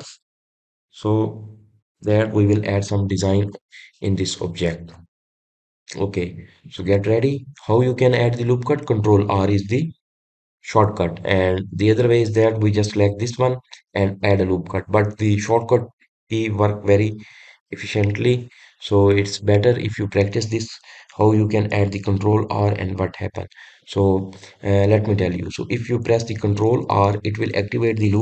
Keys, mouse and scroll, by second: 28.1 ctrl+r.